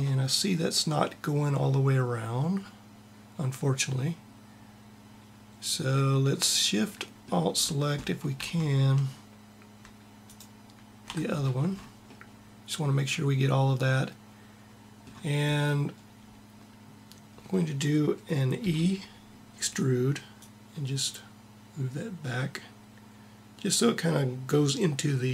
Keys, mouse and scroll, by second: 7.7-10.0 middle drag, 10.0-11.1 drag, 11.5 click, 11.7 middle click, 18.3 e.